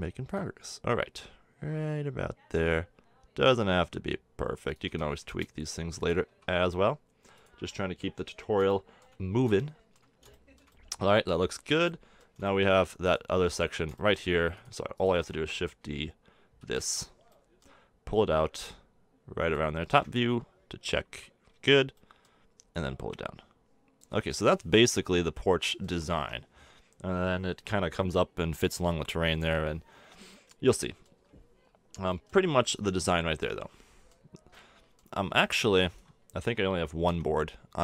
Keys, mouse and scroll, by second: 0.9 click, 4.8 s, 6.3 a, 8.7-10.2 drag, 10.2-11.2 middle drag, 13.0-16.6 middle drag, 16.6 shift+d, 19.9 KP_7, 21.5 KP_1, 25.0 a, 25.1 Tab, 25.9 a, 26.2 Tab, 32.7-33.5 middle drag, 33.5-34.5 drag, 34.5-37.0 middle drag, 37.0 Tab.